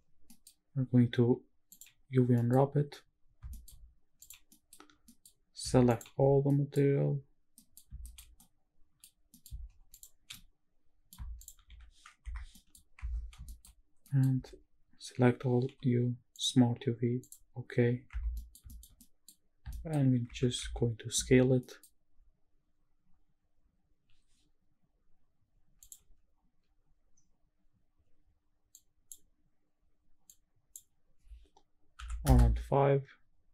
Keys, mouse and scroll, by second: 0.3 middle drag, 0.4 scroll up 2, 1.9 click, 2.3 middle drag, 2.9-3.4 scroll up 1, 3.5 shift+middle drag, 3.5-4.2 shift+scroll up 2, 4.2 click, 4.4 scroll down 1, 4.5 middle drag, 5.0 scroll down 1, 5.1 middle click, 5.4 scroll up 1, 5.9 shift+click, 6.5 middle drag, 6.5 scroll down 1, 6.9 scroll up 1, 7.5 middle drag, 8.1 shift+middle drag, 8.4-9.0 middle drag, 9.3 middle click, 9.9 shift+click, 10.3-11.1 middle drag, 11.4 shift+click, 11.8 g, 12.2 Escape, 12.4 scroll down 2, 12.5 middle drag, 13.0 Tab, 13.3-14.1 shift+scroll up 5, 13.5 shift+middle click, 14.0 middle click, 14.3 a, 15.6 u, 18.1 Tab, 18.3 middle click, 18.6 shift+middle drag, 19.0 scroll up 1, 19.0 middle drag, 19.4 scroll down 1, 19.7 shift+middle drag, 20.3 Tab, 20.6 Tab, 21.6 middle click, 22.6-23.1 scroll up 1, 27.2-28.0 scroll up 5, 28.0 click, 28.0-28.5 scroll down 1, 29.5 click, 29.5-30.3 scroll up 1, 30.3-32.3 drag, 33.3-33.5 scroll up 1.